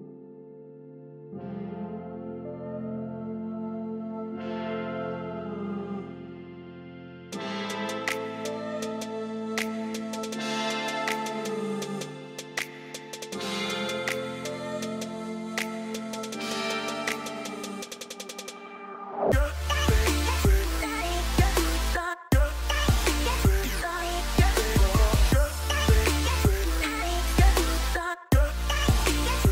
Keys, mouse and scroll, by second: 5.4 right click, 5.9 right click.